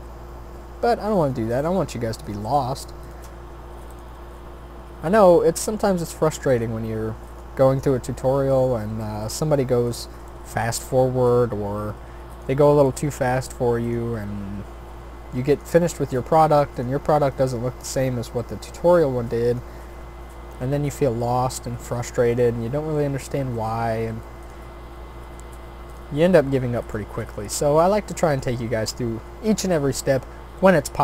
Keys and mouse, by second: 1.5 r, 2.4 g, 3.3 e, 4.1 s, 5.6 e, 6.7 s, 7.6 e, 8.9 s, 10.7 click, 11.2 e, 12.8 s, 14.3 e, 15.9 r, 17.1 s, 18.3 g, 22.5 shift+d, 23.5 r, 24.8 e, 26.2 s, 27.2 e, 28.7 s, 30.2 e.